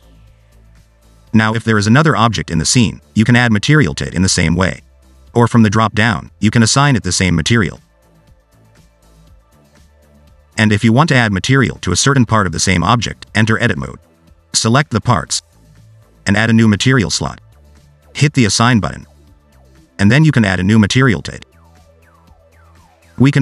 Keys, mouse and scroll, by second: 1.1 shift+right click, 1.4 shift+a, 2.0 s, 3.8-4.1 scroll down 3, 6.0 click, 10.4 x, 12.3 click, 13.0 Tab, 13.2 scroll up 2, 14.4 click, 14.6 shift+click, 14.7 shift+click, 14.8 shift+click, 16.7 click, 19.4 click, 20.4 Tab, 21.7 click, 21.9-22.9 scroll up 2, 23.1 scroll down 2.